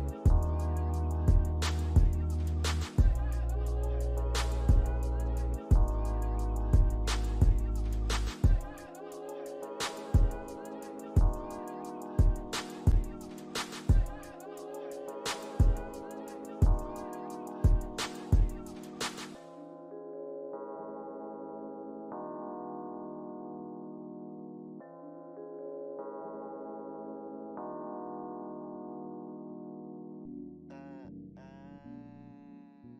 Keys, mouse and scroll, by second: 0.7 BackSpace, 1.6 alt+click, 2.1 alt+scroll up 1, 2.6 alt+click, 3.4 scroll down 1, 3.9 alt+click, 5.2 alt+click, 7.6 alt+click, 8.1 scroll up 1, 9.9 scroll down 1, 10.3 alt+click, 10.8 alt+scroll down 1, 12.0 alt+click, 12.7 alt+scroll up 1, 15.2 ctrl+click, 15.6 scroll down 2, 15.9 alt+middle click, 16.6 ctrl+click, 17.4 alt+middle click, 18.2 scroll up 1, 19.5 alt+click, 27.6 alt+click, 28.4 alt+middle click, 29.1 alt+click, 30.0 ctrl+click, 31.2 ctrl+click.